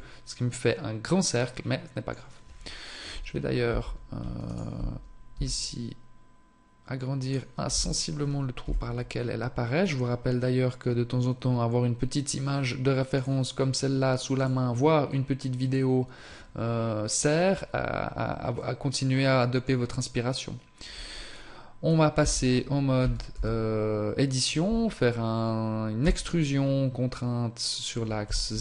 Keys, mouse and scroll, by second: 0.0 middle click, 3.4 scroll up 1, 3.8 Tab, 4.5 alt+right click, 5.4 s, 7.8 Tab, 8.7 KP_7, 18.6 middle click, 19.9 scroll down 1, 22.3 Tab, 23.1 a, 28.3 z.